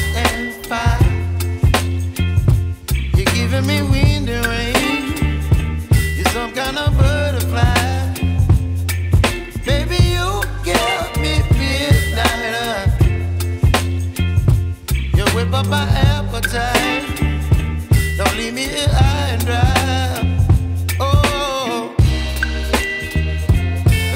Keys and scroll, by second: 0.1 Escape, 9.7 c, 10.1 F4, 10.6 Escape, 18.1 shift+Page_Down.